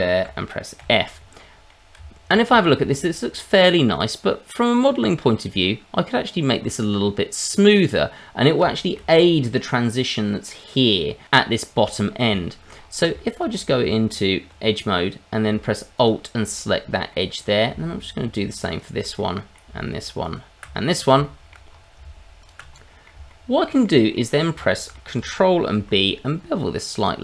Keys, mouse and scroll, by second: 0.8 f, 1.0-1.4 scroll down 2, 1.4 middle click, 1.9 Tab, 2.5 shift+middle click, 2.8-4.3 scroll up 1, 4.3 middle click, 4.3 scroll up 1, 5.6-6.0 scroll up 1, 6.9-7.3 scroll up 2, 7.6 middle click, 8.7 shift+middle click, 9.0-9.4 scroll up 1, 9.4 middle click, 11.6 scroll down 1, 11.9 middle click, 12.3 shift+middle click, 12.7 scroll up 2, 13.1 shift+middle click, 13.5-14.4 scroll up 2, 13.8 Tab, 15.9 alt+click, 16.5-16.8 scroll down 3, 17.1 middle click, 18.7 alt+shift+click, 19.1 middle click, 20.2 alt+shift+click, 20.7 middle click, 21.2 shift+middle click, 21.7-22.0 scroll up 2, 22.4 alt+shift+click, 22.7 middle click, 23.3 shift+middle click, 24.1 middle click, 24.6 shift+middle click, 25.7 ctrl+b.